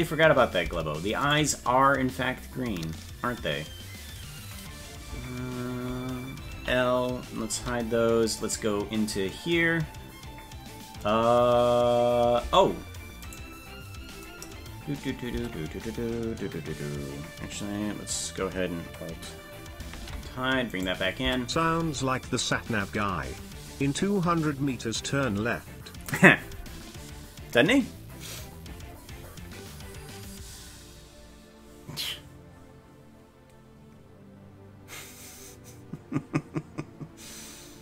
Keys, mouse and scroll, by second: 0.7 Tab, 1.2 right click, 6.6 ctrl+;, 7.6 h, 8.3 right click, 12.5 Tab, 13.3 right click, 15.4 Tab, 20.0 alt+h, 20.7 right click, 21.2 Tab.